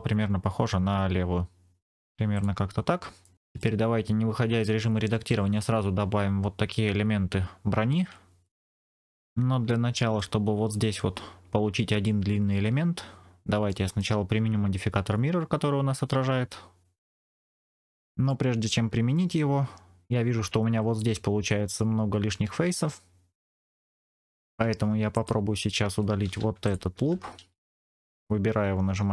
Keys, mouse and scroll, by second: 2.2 click, 3.1 middle click, 9.6 middle click, 13.6 middle click, 18.2 middle click, 25.0 click, 25.8 2, 26.5 alt+click.